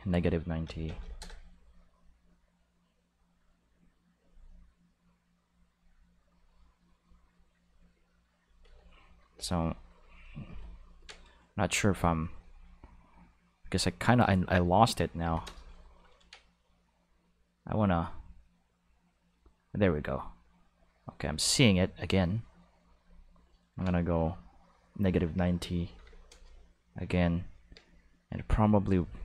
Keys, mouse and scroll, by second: 0.6 -, 0.9 9, 1.0 0, 1.2 Return, 4.2-5.7 drag, 6.3-7.4 drag, 8.4 click, 9.3 o, 9.5 click, 9.8 click, 10.1 click, 10.5 o, 10.6 click, 12.3 click, 13.6 click, 14.5 click, 15.2 o, 15.4 Return, 16.8-23.0 drag, 25.6 -, 25.9 9, 26.0 0, 26.3 Return, 28.8-29.2 drag.